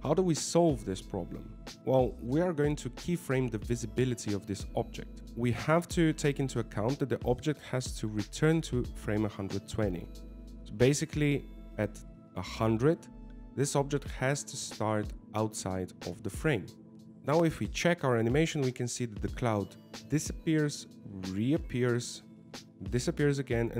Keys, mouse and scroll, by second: 13.6 click, 15.3 g.